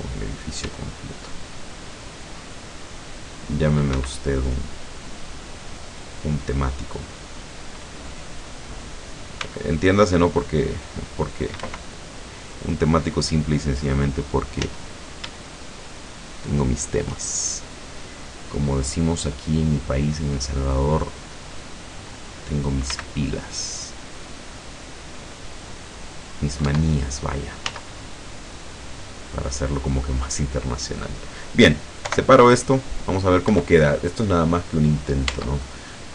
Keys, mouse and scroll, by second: 0.7 c, 1.4-3.2 drag, 3.4 click, 4.0 Escape, 4.3 middle click, 5.0-6.7 middle drag, 8.0 middle click, 9.5 c, 9.7 click, 10.3-11.4 drag, 11.6 Escape, 12.2 scroll up 1, 12.8-13.2 scroll down 1, 14.7 z, 16.4 shift+right click, 18.5 click, 18.7 middle click, 19.4-21.2 middle drag, 21.6 middle click, 23.0 c, 23.6-26.6 drag, 26.7 Escape, 27.7 z, 28.1-29.3 middle drag, 29.3 click, 29.9-31.0 middle drag, 31.1-31.4 scroll down 2, 32.1 p, 32.8 click, 33.5 Escape, 35.3 Tab, 35.6 right click.